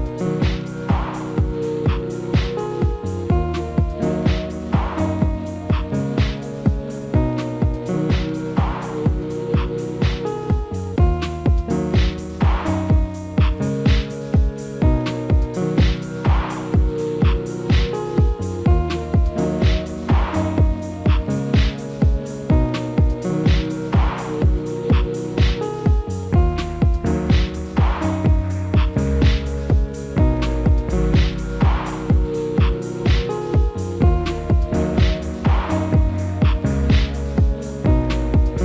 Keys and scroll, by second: 3.0 alt+x, 19.2 alt+w, 21.5 F4, 23.4 ctrl+a, 33.8 alt+x.